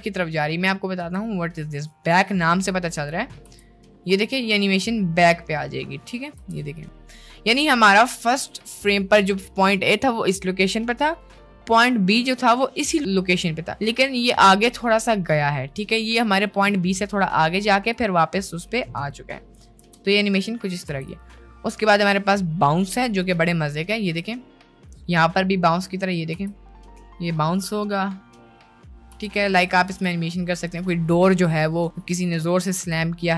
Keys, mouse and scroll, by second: 1.0 t, 3.6 space, 6.4 space, 6.7-9.0 drag, 9.5 middle drag, 11.0-12.4 drag, 12.9 middle click, 14.0-15.0 drag, 18.1-19.3 drag, 19.8 space, 21.0 space, 21.2 click, 22.0 t, 23.6-24.0 middle drag, 25.9 middle click, 26.3 space, 29.3 space, 29.5 click, 29.9 space, 32.8 space.